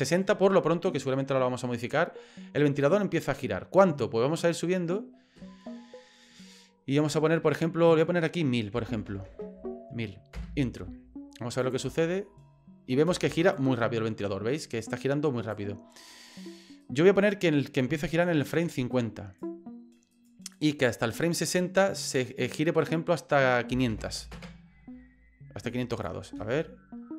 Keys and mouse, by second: 4.4-7.5 drag, 8.0-10.8 drag, 9.1 KP_0, 9.3 KP_0, 11.6 click, 11.8 space, 13.1 space, 13.5-15.5 drag, 16.0 right click, 16.8-18.2 right drag, 18.9 right click, 20.1 right click, 20.5 click, 22.4-24.9 drag, 24.0 KP_0, 25.9 click, 26.3 space.